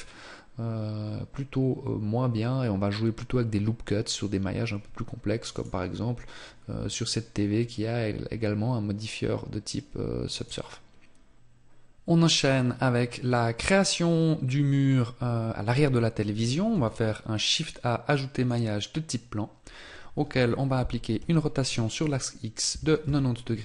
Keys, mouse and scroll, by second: 5.5 right click, 10.3 right click, 16.7 shift+a, 21.1 r.